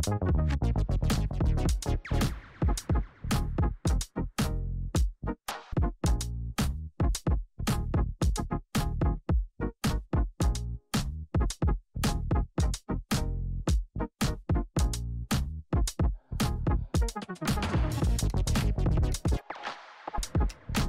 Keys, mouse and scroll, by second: 3.1 space, 3.5 click, 3.7 space, 5.5 click, 5.9 space, 8.1 space, 10.7-13.8 drag, 15.2 click, 18.2 click.